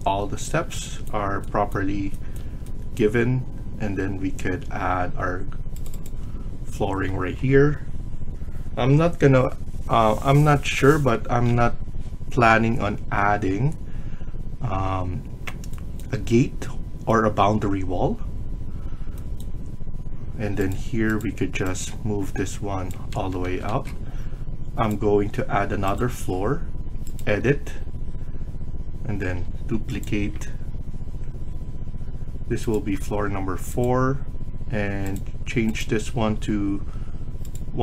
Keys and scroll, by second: 23.2 Escape, 23.3 Escape, 23.5 Escape.